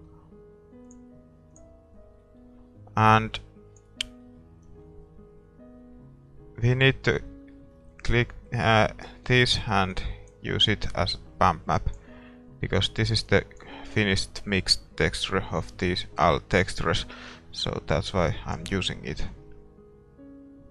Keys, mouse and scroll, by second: 18.6-20.7 drag.